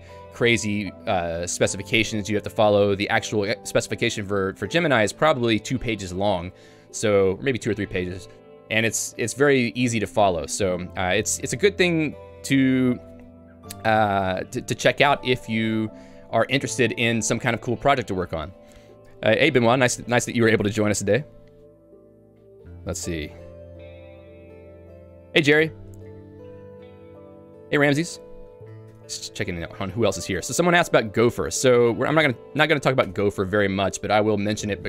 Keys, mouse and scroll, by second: 26.0 click, 28.9 Escape, 31.5 j, 32.1 Home, 32.5 j, 33.0 Tab.